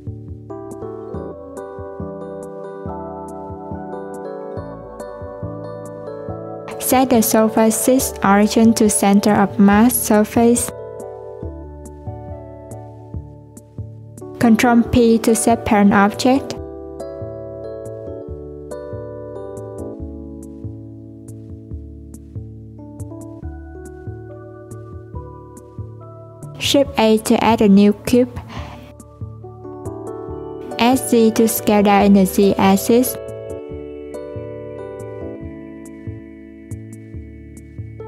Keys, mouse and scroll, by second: 0.4 click, 1.1 click, 2.0 click, 3.0 click, 4.3 click, 5.2 click, 5.7 click, 6.9 click, 7.4 right click, 9.9 click, 11.0 click, 13.4 click, 14.0 shift+click, 14.3 shift+click, 14.8 shift+click, 15.7 ctrl+p, 16.7 click, 17.3 click, 17.8 s, 19.5 click, 20.5 click, 22.5 click, 23.2 click, 24.6 click, 25.3 click, 26.6 click, 27.2 shift+a, 28.8 s, 32.3 click, 34.3-36.2 scroll up 1, 36.2 /, 36.9-38.0 scroll down 2.